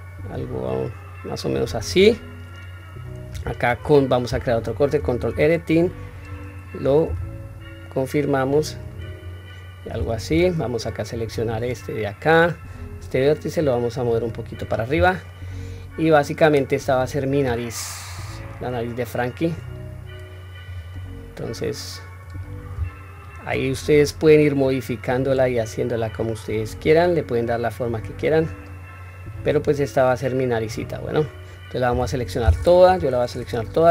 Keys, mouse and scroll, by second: 4.7 ctrl+r, 6.8 s, 10.5 click, 10.5 1, 12.1 click, 13.3-14.4 drag, 14.7-15.3 scroll down 2, 15.0-17.1 middle drag, 17.8 click, 18.6 click, 20.7 middle click, 21.9 click, 22.9 shift+click, 23.3 middle click, 24.4-25.8 drag, 26.4 click, 27.2 click, 28.4-31.0 middle drag, 32.6 KP_1, 33.0 scroll up 1, 33.7 s.